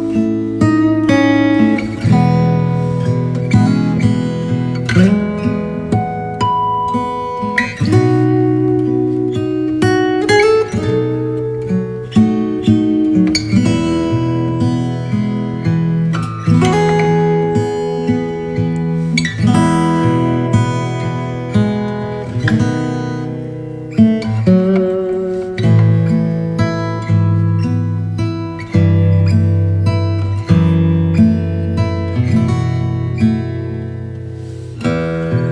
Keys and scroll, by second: 17.8 super+g.